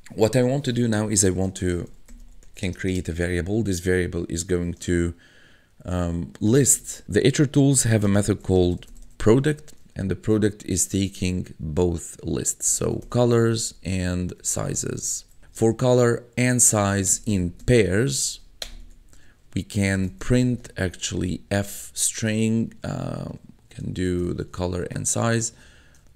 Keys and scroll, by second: 1.5-3.3 typing, 6.3-10.0 typing, 12.3-21.9 typing, 18.8 Tab, 23.5 shift+p, 24.1 BackSpace, 24.4 shift+[, 25.5 shift+-, 26.0 BackSpace.